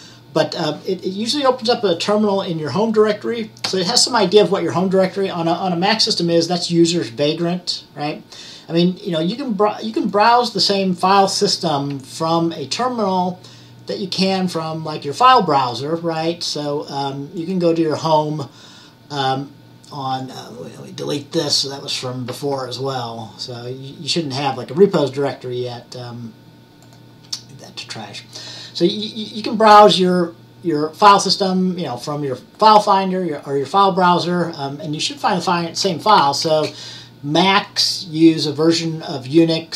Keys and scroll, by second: 36.1-36.8 typing.